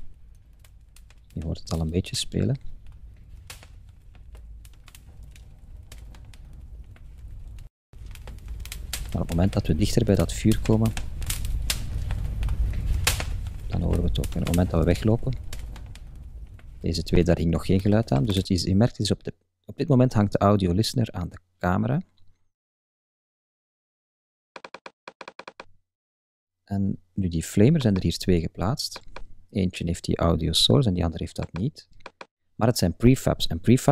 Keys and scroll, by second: 0.0 Up, 0.5 Right, 0.6 Up, 1.1 Right, 1.3 Up, 1.7 Left, 1.9 Up, 2.3 Left, 2.6 Up, 3.0 Right, 3.2 Up, 3.8 Left, 4.0 Up, 4.4 Right, 4.6 Up, 5.1 Right, 5.2 Up, 5.6 Right, 5.9 Up, 6.3 Right, 6.5 Up, 6.9 Left, 7.1 Up, 7.6 Left, 7.7 Up, 8.3 Left, 8.4 Up, 12.9 Left, 13.4 Up, 13.9 Left, 14.4 Up, 14.9 Left, 15.1 Up, 15.6 Left, 15.9 Up, 16.7 Right.